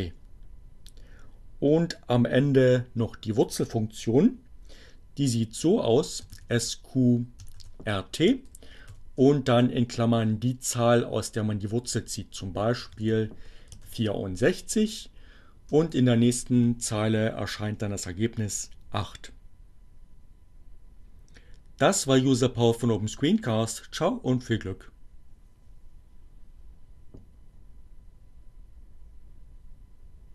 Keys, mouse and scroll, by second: 4.9-5.8 typing, 7.6 t, 8.1 shift+8, 12.5-13.9 typing, 15.4 Return.